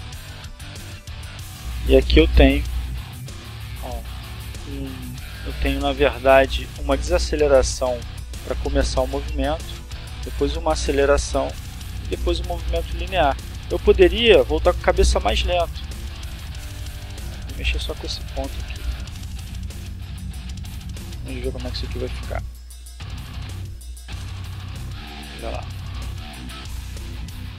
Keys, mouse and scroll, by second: 0.7-3.5 drag, 4.3 click, 5.5 click, 6.4-10.9 drag, 11.3 right click, 12.3 click, 12.9 right click, 13.8 right click, 14.8 right click, 15.7 g, 17.3 click, 18.3-19.1 drag, 20.1 click, 21.1 click, 22.1-23.0 drag, 23.8 click, 25.1 click, 25.8-26.8 drag.